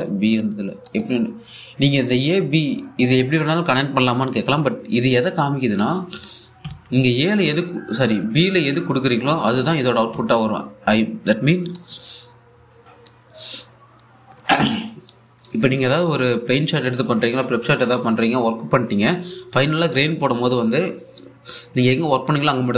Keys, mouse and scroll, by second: 6.4 click, 7.3-8.1 typing, 8.8-10.1 drag, 10.8 1, 12.4-14.8 drag.